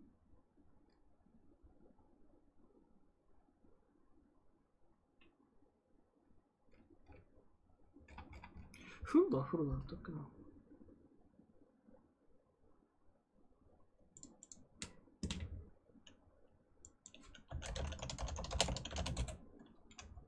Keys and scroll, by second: 17.1-19.3 typing.